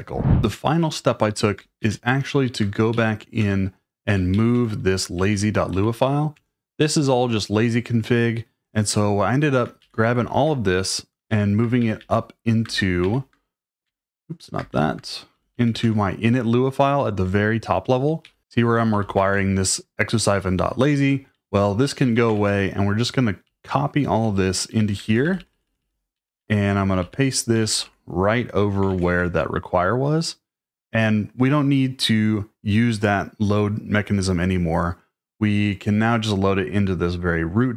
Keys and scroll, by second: 1.8 -, 2.9 k, 3.4 Return, 4.0-7.2 typing, 6.3 Return, 9.8-13.2 typing, 13.8 Escape, 14.7 -, 15.3 j, 15.5 j, 15.8 Return, 18.0-19.7 typing, 21.0 Escape, 22.0 k, 22.3 shift+p, 23.4-29.5 typing.